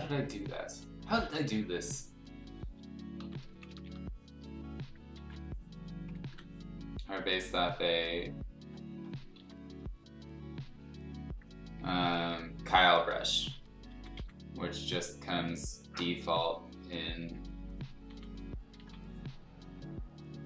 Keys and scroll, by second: 3.2 ], 3.4 ], 3.5 ], 3.8 ], 5.2 ctrl+z, 6.2 ctrl+z, 8.0 x, 9.4 ctrl+z, 11.7-12.7 typing, 13.9 ctrl+z, 14.1 x, 18.8 ctrl+z.